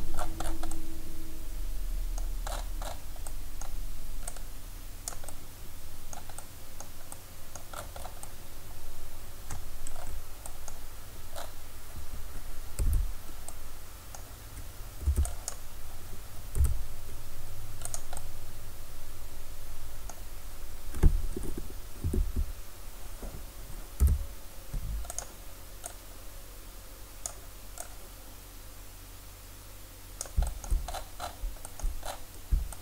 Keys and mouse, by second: 4.3-5.3 drag, 5.3 middle click, 5.4 click, 5.7 middle drag, 5.9-6.6 drag, 7.4 middle click, 12.9 a, 15.1 b, 16.6 s, 18.0 drag, 22.2 KP_1, 24.0 s, 25.2-29.9 drag, 31.0-31.5 middle drag, 32.1 middle click.